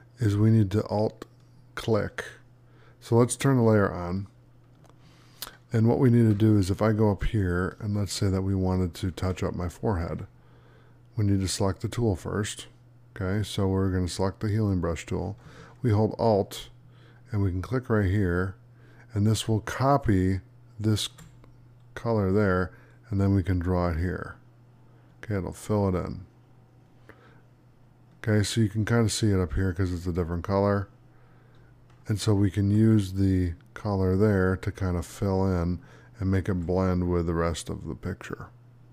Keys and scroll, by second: 7.9 space.